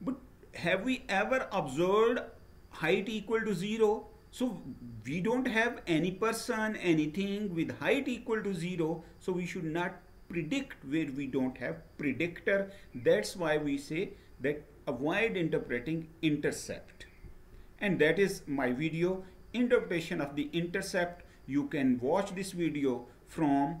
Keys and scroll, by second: 16.9 Right.